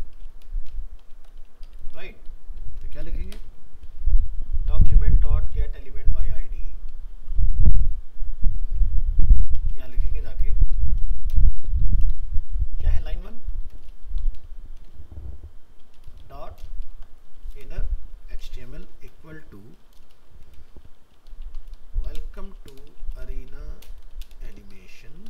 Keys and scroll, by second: 5.0 ctrl+shift+Right, 7.2 ctrl+c, 8.6 ctrl+v.